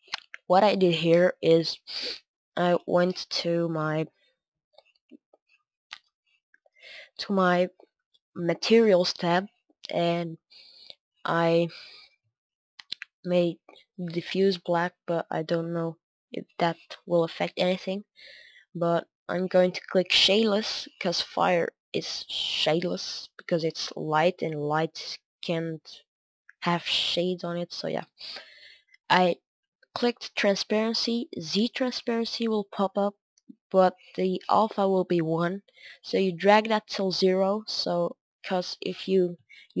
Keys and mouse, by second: 0.0 F11, 0.9-39.8 drag, 38.3 middle click.